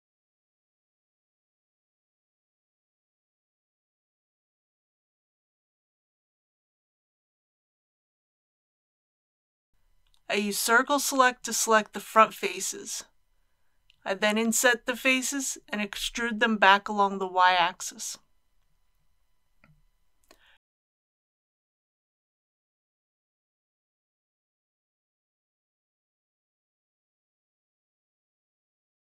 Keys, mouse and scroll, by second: 1.6 click, 7.1 KP_1, 8.8 alt+a, 9.9 c, 11.1 click, 12.3-13.4 right drag, 15.1 i, 17.6 click, 18.2 scroll up 1, 18.8-20.4 middle drag, 20.7 e, 21.1 y, 25.8 shift+click.